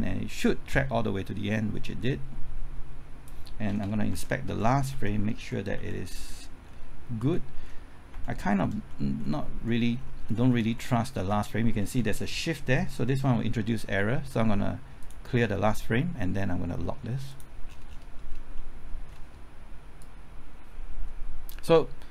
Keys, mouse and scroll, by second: 1.8-3.5 drag, 4.1-5.7 typing, 6.0 Right, 6.4 Left, 7.2 Right, 7.5 Left, 8.1 Right, 8.3 Left, 8.7 Right, 9.0 Left, 9.7-11.0 typing, 11.0 Left, 11.2 Right, 11.5 Left, 11.8 Right, 12.0 Left, 12.2 Right, 12.6 Left, 15.0 click, 17.6-18.2 scroll down 1, 18.5 middle click, 20.0-22.1 drag.